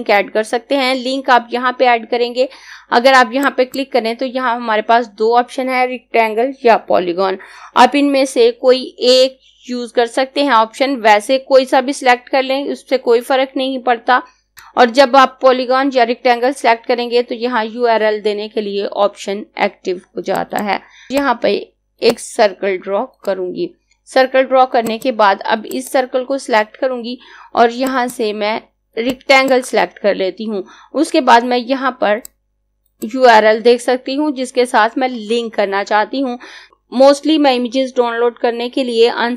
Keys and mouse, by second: 3.4 click, 14.5 click, 20.3 click, 32.0 click.